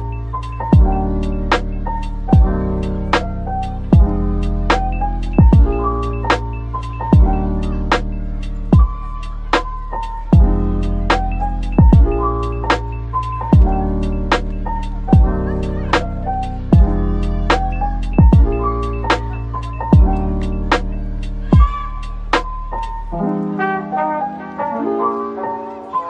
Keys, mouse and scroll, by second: 1.1-1.4 scroll down 1, 1.4 middle click, 2.3 shift+right click, 2.8 a, 5.1-5.9 scroll, 5.9 Tab, 6.5 a, 8.4-8.7 scroll down 1, 10.2 middle click, 10.7-11.0 typing, 12.1-13.1 typing, 13.6 Tab, 14.2 Tab, 14.7 typing, 15.3 ctrl+r, 16.0-16.4 scroll up 1, 16.5 double click, 18.0 typing, 18.8 right click, 19.4-20.2 typing, 20.9-22.0 scroll down 1, 22.7-23.6 typing, 23.2 click, 24.2 middle click, 25.2 typing, 25.9 double click.